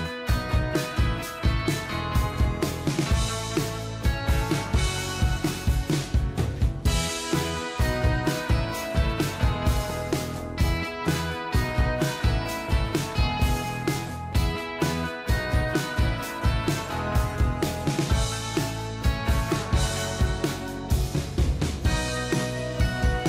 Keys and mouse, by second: 1.1 double click, 1.3 ctrl+click, 2.4 ctrl+t, 3.0 shift+click, 5.7 double click, 16.7 ctrl+click, 22.6 ctrl+click.